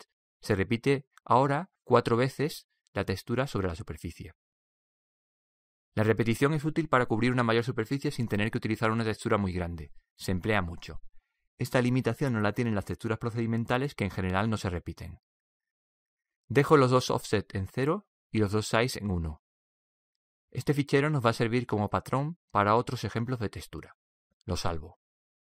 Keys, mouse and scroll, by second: 0.6-2.5 middle drag, 6.0-8.0 drag, 18.3-21.8 drag, 23.6-25.3 drag.